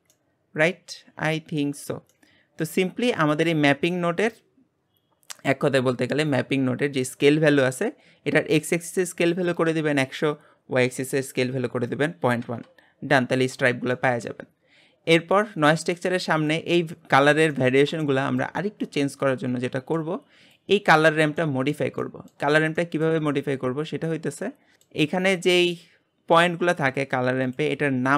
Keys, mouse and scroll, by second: 4.2-17.1 drag, 17.1-17.5 scroll up 2, 17.5-18.7 middle drag, 18.7-19.0 scroll up 1, 19.0-20.5 middle drag, 20.5-21.4 drag, 21.4-22.6 middle drag, 22.6-24.1 scroll up 3, 22.8-23.2 shift+middle drag, 24.1-24.6 scroll up 4, 24.7-27.5 shift+middle drag, 27.5-28.1 drag.